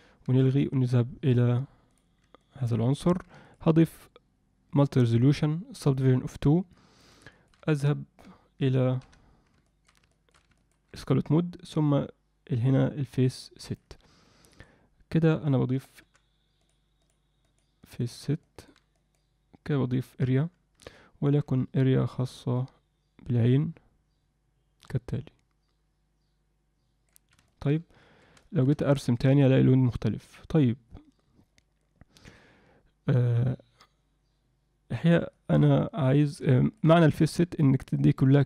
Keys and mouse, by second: 1.2 click, 1.9 click, 2.4 middle click, 3.4-4.8 drag, 5.9 click, 6.7 alt+middle click, 7.3 shift+middle click, 7.7 middle click, 9.1 F7, 9.7 alt+middle click, 10.1 shift+middle click, 10.5 ctrl+alt+middle click, 14.4 click, 16.0 f, 17.0 click, 17.4 click, 17.8 click, 18.4 middle click, 18.9 click, 20.9 alt+middle click, 22.0-27.1 drag, 27.5 alt+shift+middle click, 28.4 shift+middle click, 28.9 alt+middle click, 29.4-35.0 drag, 35.3 ctrl+alt+middle click, 35.8 shift+middle click, 36.5 ctrl+alt+middle click, 37.1 shift+middle click.